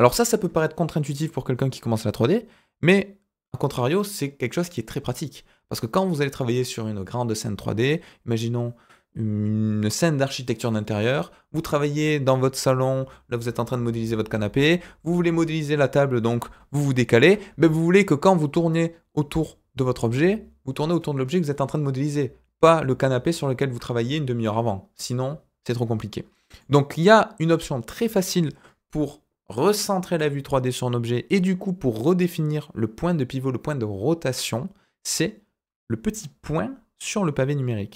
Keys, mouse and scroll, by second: 16.7-17.2 shift+middle drag, 17.7-20.1 middle drag, 22.0 scroll down 2, 26.3 scroll down 2, 26.6-27.5 middle drag, 27.9-31.1 scroll up 2.